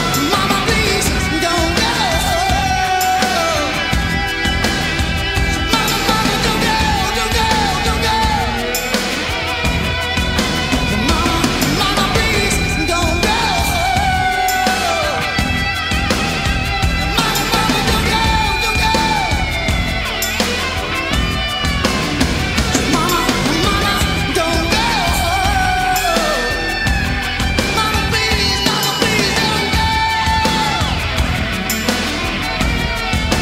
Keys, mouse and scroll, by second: 1.3 middle click, 1.5-2.9 right drag, 2.9-7.8 middle drag, 7.8-8.8 right drag, 8.8 middle click, 9.5 middle click, 11.1 right click, 11.9-21.9 middle drag, 15.6-19.2 drag, 15.6-21.9 right drag, 21.7 z, 22.7-24.6 right drag, 24.6-33.4 middle drag.